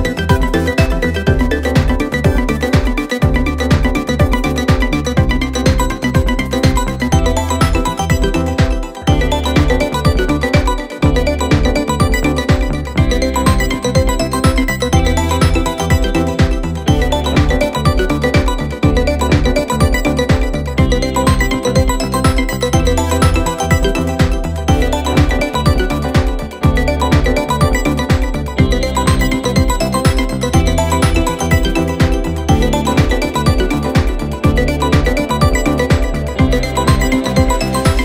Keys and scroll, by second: 5.9 4, 10.4 9, 10.5 Return, 10.7 0, 10.8 Return, 10.9 9, 11.1 Return, 12.9 3, 13.6 ], 23.5 F1, 37.7 Escape.